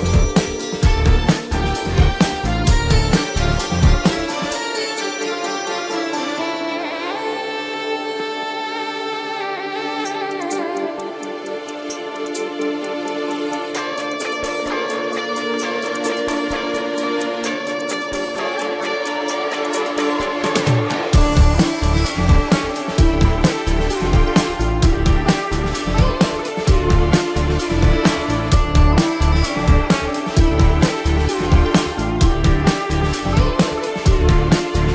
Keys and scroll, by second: 4.8 ctrl+=, 11.3 ctrl+=, 11.5 space, 14.7 space, 18.3 space, 19.1 ctrl+alt+z, 19.4 ctrl+alt+z, 20.6 ctrl+alt+z, 21.2 ctrl+alt+z, 23.8 space, 27.9 ctrl+-, 28.6 ctrl+alt+z, 29.0 ctrl+alt+z, 29.4 ctrl+alt+z, 29.8 ctrl+alt+z, 30.9 ctrl+alt+z, 32.9 space, 33.2 ctrl+=.